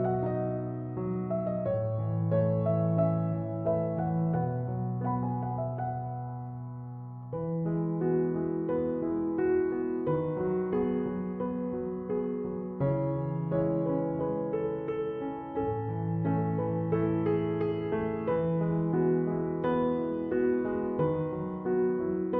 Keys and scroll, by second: 6.0 3, 6.1 Return, 15.6 Escape, 20.7 2, 21.0 0.